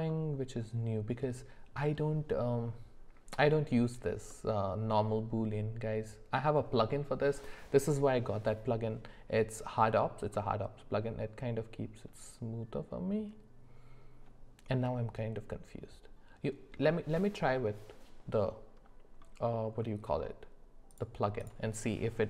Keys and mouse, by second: 0.1-1.2 middle drag, 4.3-6.9 middle drag, 10.3-16.8 middle drag, 20.9 click, 21.4 click.